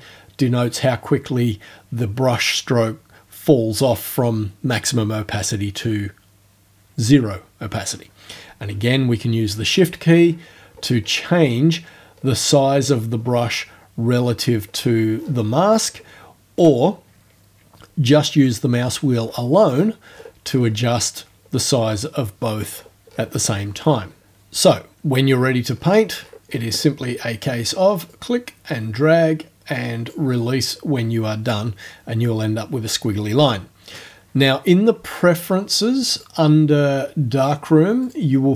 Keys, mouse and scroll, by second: 10.2-10.6 shift+scroll up 2, 11.0-11.7 shift+scroll up 2, 11.7 shift+scroll down 2, 12.2-12.5 shift+scroll up 2, 15.6-16.1 shift+scroll up 1, 19.2-20.9 scroll down 8, 21.4-21.8 scroll down 2, 22.0 scroll down 2, 22.7-23.7 scroll up 6, 24.1 scroll up 2, 25.7-26.1 scroll up 2, 26.2-27.3 scroll up 2, 28.1-30.3 drag, 36.1 click, 38.1 click.